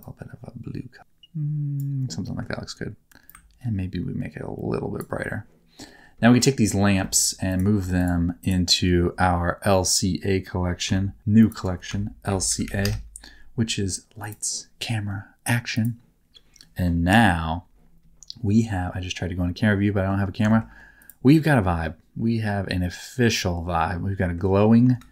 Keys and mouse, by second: 2.3 middle click, 3.2-4.9 ctrl+drag, 6.1 middle click, 7.0 shift+middle click, 7.4 click, 8.3 shift+click, 10.8 m, 15.7 click, 17.0 KP_0, 19.7 middle click, 20.5 shift+middle click, 21.9-24.3 middle drag.